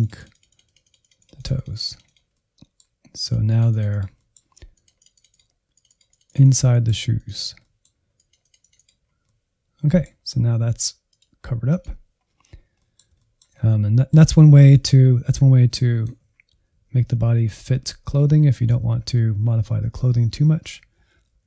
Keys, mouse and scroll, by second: 2.2 middle click, 3.2-4.2 drag, 4.2 middle click, 4.7-6.7 drag, 6.7 middle click, 7.1 click, 7.6 middle click, 8.1 click, 9.0 scroll down 2, 9.2-11.1 middle drag, 11.1-12.2 drag, 12.2-12.7 scroll down 2, 12.7-15.7 middle drag, 15.7 scroll up 1, 16.2-16.7 scroll up 1, 16.7-17.0 Right, 17.5 Left, 17.6 Left, 17.8 Left, 18.0 Left, 18.2 Left, 18.4-18.9 Left, 19.1 Left, 19.2 Left, 19.4 Left, 19.6 Left, 19.8 Left, 20.1 Left, 20.3 Left, 20.5-21.2 Right, 21.4 Right.